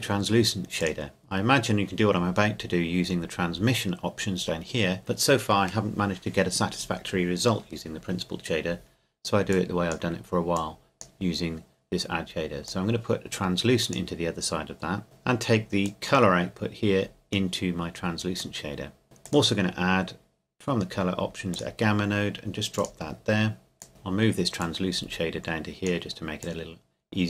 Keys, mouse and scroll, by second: 3.0 click, 9.5 click, 15.8 click, 23.9 middle click, 24.6-27.2 drag.